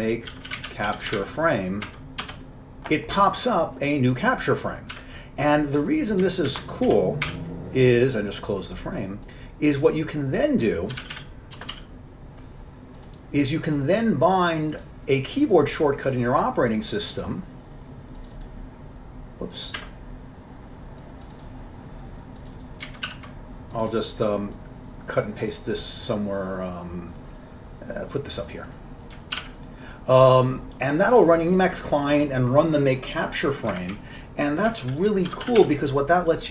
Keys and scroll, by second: 0.0-1.8 typing, 2.0 Tab, 2.3 Return, 3.8-5.0 typing, 6.6 ctrl+x, 7.0 5, 7.4 0, 9.4 typing, 10.8-13.8 typing, 19.9 Escape, 23.0 ctrl+a, 23.2 ctrl+c, 29.5 ctrl+y, 33.8 Up, 35.0 ctrl+k, 35.4 ctrl+k, 35.5 ctrl+x, 35.7 ctrl+s.